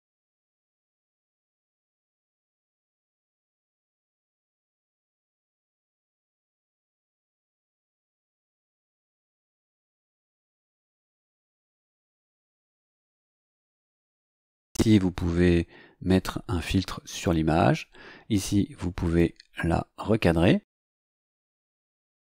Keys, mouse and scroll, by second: 1.0 click, 2.0 click, 5.7 click, 13.8 click, 19.0 click.